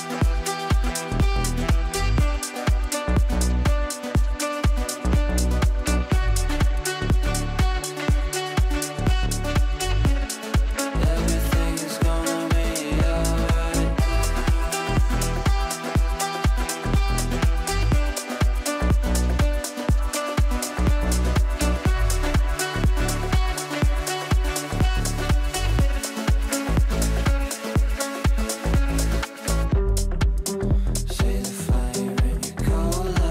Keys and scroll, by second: 0.5 ctrl+r, 24.6 Delete.